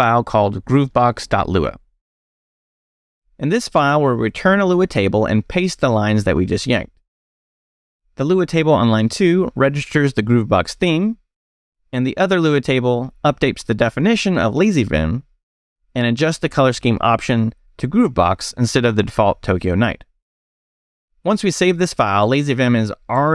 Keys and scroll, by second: 0.0-1.7 typing, 1.9 Return, 3.2 Return, 5.1-8.9 typing, 14.4 Escape, 20.0-21.0 typing.